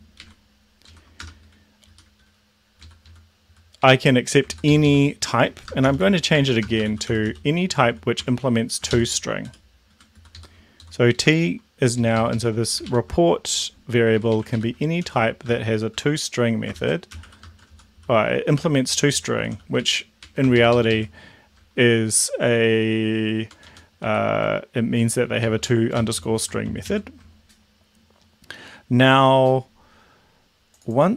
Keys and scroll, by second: 0.2 ctrl+shift+Right, 0.9 shift+Left, 1.2 BackSpace, 2.0 Up, 2.9 ctrl+Left, 3.9 Right, 4.5 ctrl+shift+Left, 5.7-7.9 typing, 8.3 Tab, 9.0 ctrl+shift+Left, 9.5 Down, 9.9 End, 10.1 Left, 10.4 Left, 10.8 Left, 11.2 Left, 12.0 Left, 12.9 ctrl+shift+Right, 14.1 Right, 14.4 Right, 14.8-15.7 typing, 16.0 shift+Tab, 16.8 ctrl+shift+Left, 16.8-20.1 typing, 20.2 Right, 20.6 ctrl+shift+Left, 23.5 Right, 23.6 Up, 24.1 End, 25.0 Right, 25.3 Down, 25.4 Left, 26.0 Left, 26.1 Left, 26.3 Left, 26.8 ctrl+shift+Left.